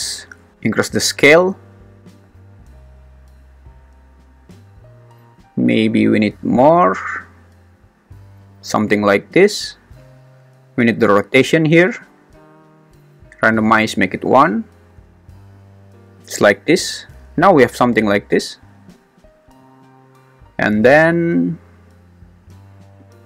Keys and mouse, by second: 0.7-3.4 drag, 6.1-8.6 drag, 9.2 click, 12.4 click, 13.6 click, 23.0-23.2 drag.